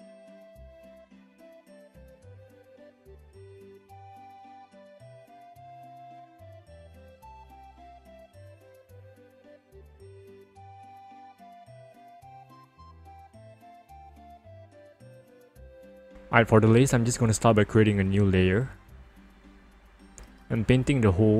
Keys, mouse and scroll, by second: 0.6 ctrl+click, 0.9 click, 1.1 click, 1.4 click, 1.5 alt+click, 1.9 alt+click, 2.2 alt+click, 3.0 alt+click, 3.2 click, 3.6 alt+click, 3.8 ctrl+alt+z, 4.0 alt+click, 4.2 alt+click, 4.5 alt+click, 4.7 ctrl+click, 4.8 right click, 5.2 click, 5.4 click, 5.7 click, 6.2 click, 6.5 right click, 7.6 click, 7.7 click, 7.9 p, 8.0 click, 8.2 click, 8.4 alt+click, 9.2 alt+click, 9.9 alt+click, 10.1 right click, 10.4 click, 11.1 right click, 11.2 click, 11.5 click, 11.9 click, 12.3 right click, 12.3 click, 12.6 ctrl+-, 13.0 ctrl+=, 13.1 scroll down 1, 16.0 click, 18.4 click, 21.1 b.